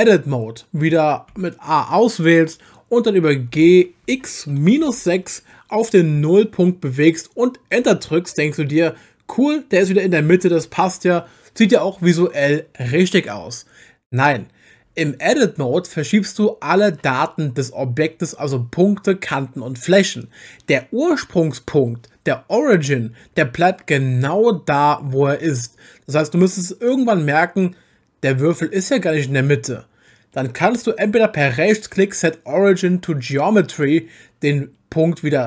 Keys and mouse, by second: 0.0 Tab, 1.3 a, 3.5 g, 4.0 x, 4.8 -, 5.0 6, 7.8 Return, 10.3 Tab, 31.5-33.8 right drag.